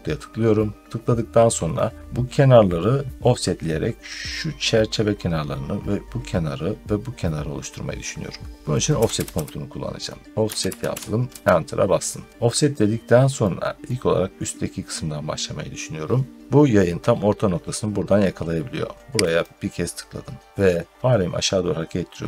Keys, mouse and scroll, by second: 8.6-11.3 typing, 12.5 middle click, 13.4 scroll up 1, 13.4 typing, 13.7 middle click, 15.6 typing, 19.3 click, 20.9 scroll up 2.